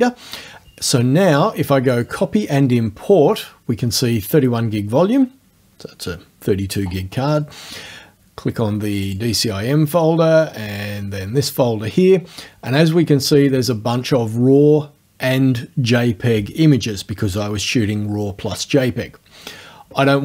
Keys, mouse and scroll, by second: 2.1 click, 7.4 click, 9.1 click, 10.7 click.